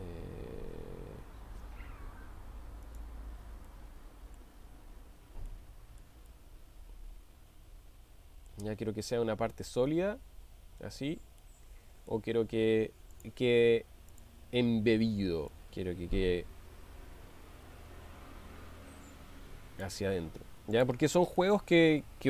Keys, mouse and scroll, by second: 3.7-4.5 middle drag, 5.7 shift+middle click, 6.5-8.7 middle drag, 11.4-12.2 middle drag, 13.1 click, 14.1 click, 15.6-20.0 drag, 21.7-22.2 middle drag.